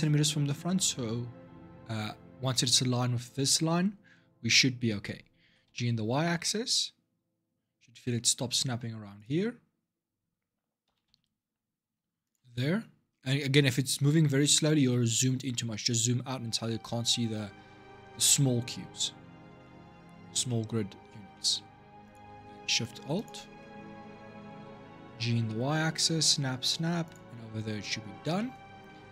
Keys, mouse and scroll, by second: 5.2 g, 9.2-9.7 scroll down 4, 9.7-10.6 scroll up 1, 10.6 g, 13.2-15.5 scroll up 4, 15.5-16.0 scroll down 3, 17.1-18.5 scroll up 4, 18.5-19.4 scroll down 3, 19.4 shift+middle click, 19.8-20.2 scroll down 1, 20.2-21.8 shift+middle drag, 21.8 click, 22.6 alt+shift+click, 22.9 alt+shift+click, 25.0 g, 27.8-28.1 scroll down 1, 28.1-29.1 shift+middle drag.